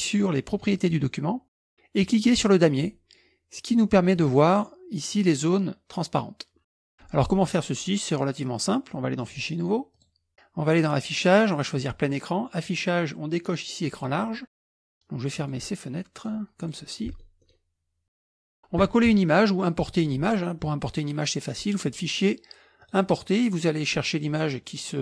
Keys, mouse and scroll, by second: 0.8 click, 2.5 click, 4.2 click, 9.3 click, 10.0 click, 10.8 click, 11.8 click, 12.6 click, 13.9 click, 15.4 click, 16.2 click, 17.1-18.0 scroll up 1, 21.8 click, 22.9 click, 24.2 click.